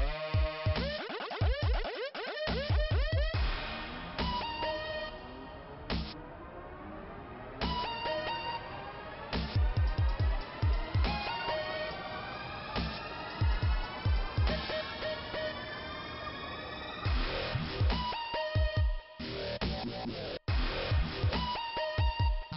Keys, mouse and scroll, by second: 0.0 click, 0.5-1.1 scroll down 1, 1.1 |, 1.8 scroll down 1, 2.3 middle click, 7.1 right click, 7.8 click, 9.0 click, 12.7 shift+Return, 13.8 click, 15.8 click, 16.5-16.8 scroll up 2, 17.6 click, 17.7 click, 18.4 click, 18.8 click, 19.7 click, 21.2 click, 21.2 click, 22.3 click.